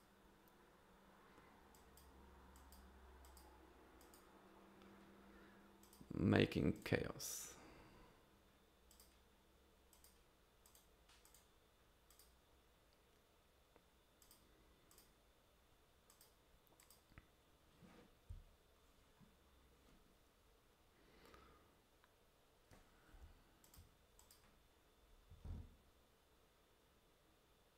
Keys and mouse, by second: 1.7 click, 2.6 click, 3.2 click, 4.0 click, 5.8 click, 6.7 click, 8.9 click, 9.9 click, 10.7 click, 11.2 click, 12.1 click, 14.2 click, 14.9 click, 16.1 click, 16.8 click, 23.2 f, 24.2-25.3 drag.